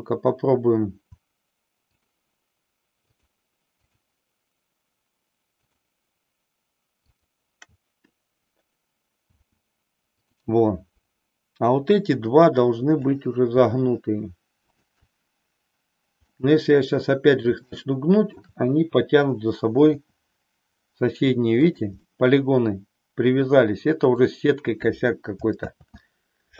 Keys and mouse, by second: 5.7 shift+click, 9.2 r, 14.6-15.9 shift+drag, 16.2-17.3 middle drag, 17.7 shift+middle click, 20.0 r, 21.7 click, 22.1-24.1 middle drag, 25.6 ctrl+z.